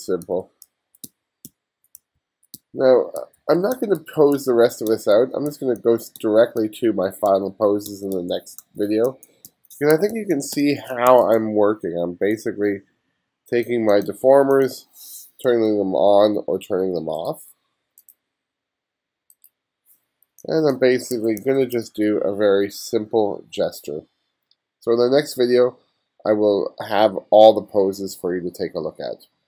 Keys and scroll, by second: 0.0-6.2 typing, 7.3-11.1 typing, 15.5 m, 20.3 space, 21.4 1.